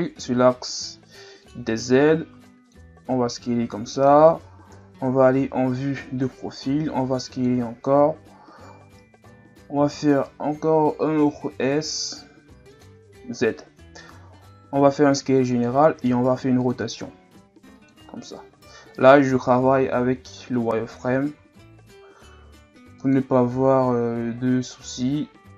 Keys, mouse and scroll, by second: 1.9-3.1 drag, 3.1 s, 4.7 KP_3, 6.7 s, 7.5 z, 8.0-8.9 ctrl+scroll up 1, 9.7 s, 13.1-13.6 ctrl+scroll up 1, 13.6-14.8 scroll up 2, 14.8 s, 16.0 r, 17.0 g, 18.3 r, 20.1-20.7 scroll up 1, 21.4 r.